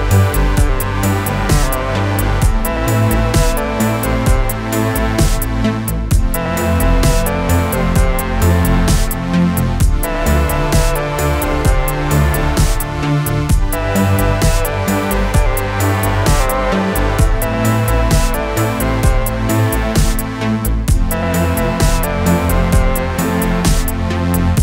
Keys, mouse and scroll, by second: 0.7 click, 2.3 Return, 5.8 u, 6.5 u, 7.1 click, 12.7 click, 13.9 ctrl+d, 15.4 click, 17.5 alt+Num_Lock, 18.0-19.1 alt+click.